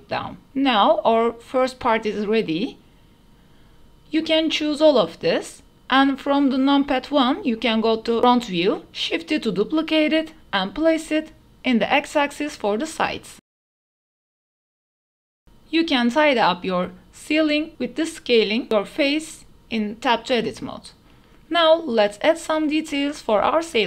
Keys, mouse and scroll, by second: 0.3-0.9 drag, 1.4 middle click, 1.7 shift+middle drag, 2.4-2.8 drag, 3.6 click, 4.3 drag, 5.1 KP_1, 6.2 shift+middle drag, 6.3 shift+click, 7.1 shift+d, 7.4 x, 10.4-11.0 drag, 11.2 shift+d, 11.4 x, 14.0 shift+middle click, 14.4 g, 14.5 x, 15.0 shift+d, 15.1 x, 16.5 click, 16.7 middle click, 16.9 Tab, 17.0 click, 17.4 g, 17.7 x, 18.6 middle click, 19.1 g, 19.2 x, 19.8 Tab, 19.9-21.0 drag, 22.9 middle click, 23.2 ctrl+s.